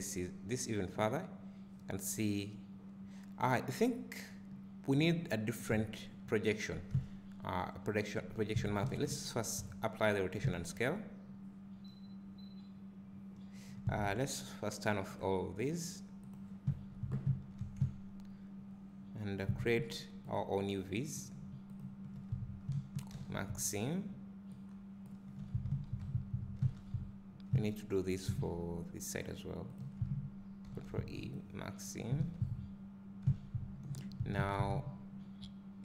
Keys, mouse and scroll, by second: 15.1 click, 16.2 click, 17.3 Tab, 17.8 `, 20.3 alt+click, 21.8 alt+shift+click, 25.0 ctrl+e, 25.4 Tab, 25.7 a, 26.8 Tab, 27.5 `, 29.7 alt+click, 31.3 ctrl+e, 32.1 a, 34.5 Tab.